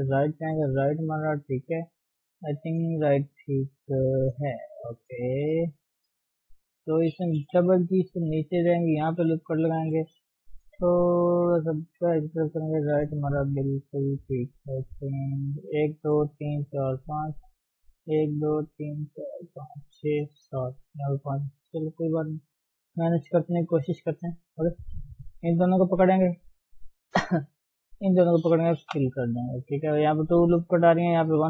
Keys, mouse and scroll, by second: 5.3 KP_1, 6.1 click, 7.6 g, 9.4 ctrl+r, 10.4 g, 12.4 KP_3, 14.3-14.6 scroll down 2, 14.8-15.8 scroll up 2, 15.8 click, 16.1 click, 16.4 click, 16.7 click, 17.1 click, 17.6 click, 18.0 click, 18.4 click, 18.8 click, 19.2 click, 19.6 click, 21.8 KP_1, 22.7-24.4 middle drag, 24.4 scroll up 1, 24.5 middle click, 25.4 click, 25.9 click, 26.4 shift+click, 27.7 shift+click, 28.1 shift+click, 28.9 f.